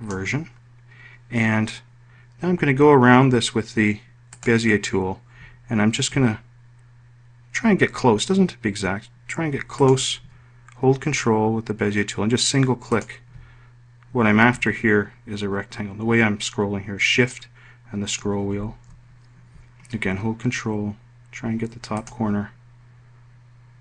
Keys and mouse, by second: 13.6 ctrl+click, 22.6 ctrl+click.